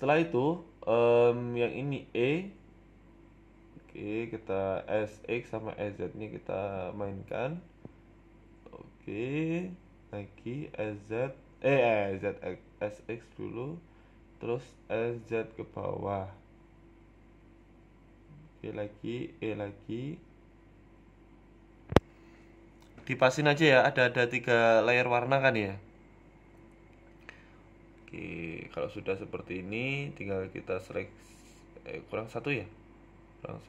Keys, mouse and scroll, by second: 0.5 e, 0.8 s, 2.3 s, 3.4 s, 3.8 e, 6.0 s, 8.1 s, 8.6 e, 13.3 e, 14.1 ctrl+z, 14.4 s, 16.9 e, 17.1 s, 18.6 s, 21.2 e, 21.4 s, 22.6 s, 24.6 s, 25.9 scroll up 3, 26.1 shift+middle click, 26.4 scroll up 1, 29.0 e, 29.2 s, 32.8 alt+shift+right click, 32.8 s, 33.3 a, 33.4 a.